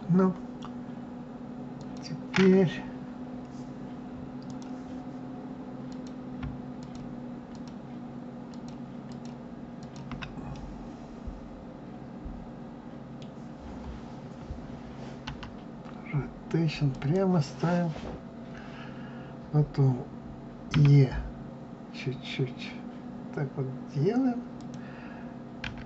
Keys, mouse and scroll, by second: 1.7 click, 4.4 click, 5.8 click, 6.8 shift+click, 7.5 shift+click, 8.5 shift+click, 9.0 shift+click, 9.8 shift+click, 10.5-13.5 middle drag, 13.6-14.3 scroll up 1, 15.3 r, 20.7 e, 25.6 s.